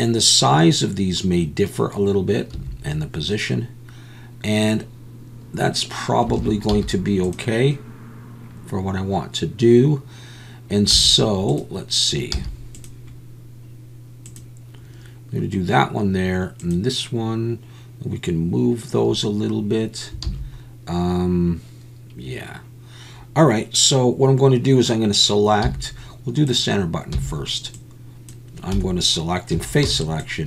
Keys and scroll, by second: 2.5 a, 6.4 alt+a, 6.7 z, 10.9 z, 12.3 z, 20.3 alt+a, 25.6 z, 27.1 c, 28.7 Escape, 28.7 `, 29.5 3, 29.8 c.